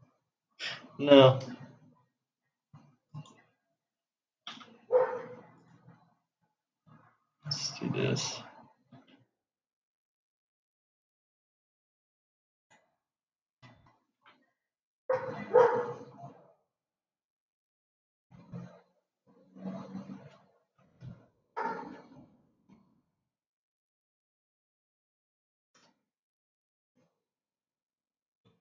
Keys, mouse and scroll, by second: 5.0 Delete, 6.0 click, 9.3 s, 14.7 g.